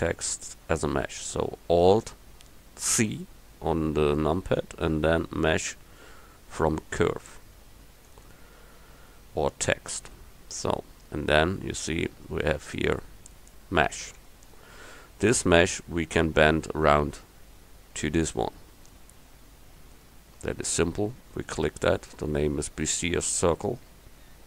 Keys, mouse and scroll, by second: 3.0 alt+c, 10.5 Tab, 12.7 a, 14.3 Tab.